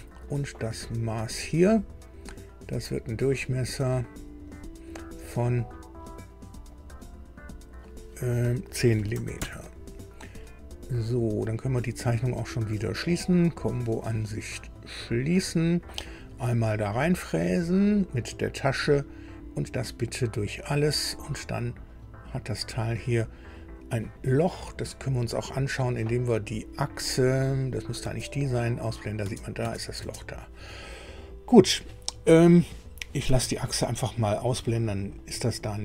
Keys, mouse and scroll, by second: 1.1 click, 3.1 click, 4.5 click, 6.7 click, 7.5 click, 8.9 KP_1, 9.1 KP_0, 9.3 KP_Enter, 13.4 click, 14.7 click, 17.5 click, 19.8 click, 20.6 click, 22.5 scroll up 1, 24.8-25.5 scroll up 2, 25.9 scroll up 2, 27.5 click, 28.0 space, 29.6 space, 29.9 space, 34.6 scroll up 2, 35.1-35.8 drag.